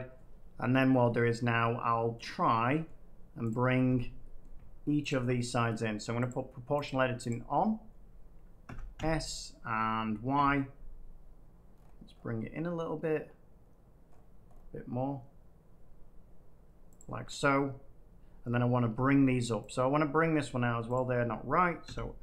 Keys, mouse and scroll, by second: 2.2 middle click, 3.4 click, 4.3 middle click, 5.0 shift+click, 6.2 click, 6.8 click, 7.3 click, 8.6 typing, 10.3 y, 11.7-12.1 scroll, 14.0 scroll up 3, 14.1 scroll down 1, 14.1-14.9 scroll up 5, 16.9 click, 17.2 scroll down 1, 18.0 middle click, 18.4 middle click, 19.6 click, 20.1 middle click, 20.9 shift+click, 21.8 s.